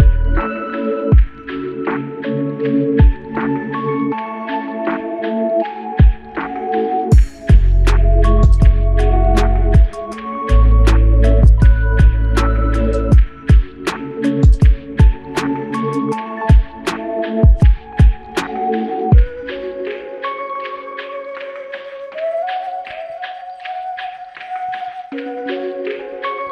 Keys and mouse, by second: 5.7 alt+click, 9.0 alt+click, 13.5 shift+click, 15.8 alt+click, 21.0 double click, 24.0 alt+click.